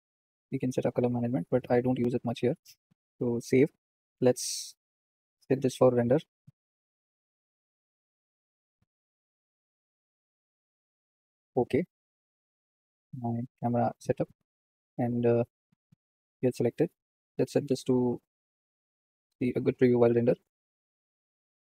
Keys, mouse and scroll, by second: 4.8 ctrl+s, 5.5 click, 6.1 n, 8.0 click, 8.6-15.6 drag, 18.5 drag.